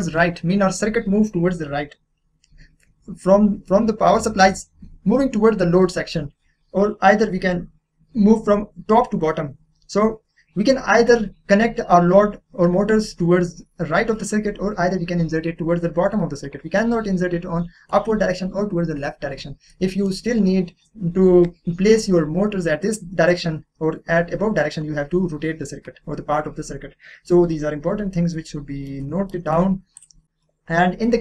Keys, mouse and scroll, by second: 11.3 scroll down 1, 11.3-12.3 scroll up 1, 12.3-13.6 scroll down 1, 19.7 scroll down 1, 19.7 middle click, 28.3-30.0 middle drag, 30.0 click.